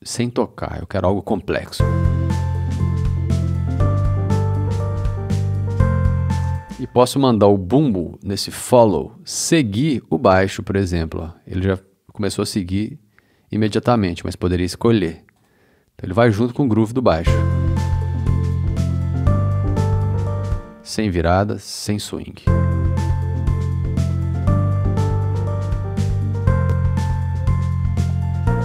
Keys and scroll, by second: 6.4 space, 17.1 space, 20.4 space, 22.3 space, 27.3 e.